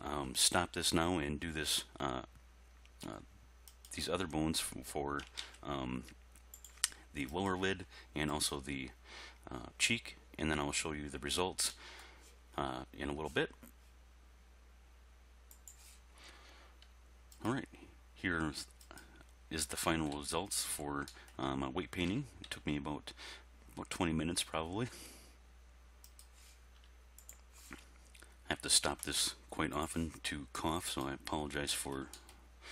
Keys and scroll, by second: 5.4 ctrl+z, 22.1 r, 22.5 x.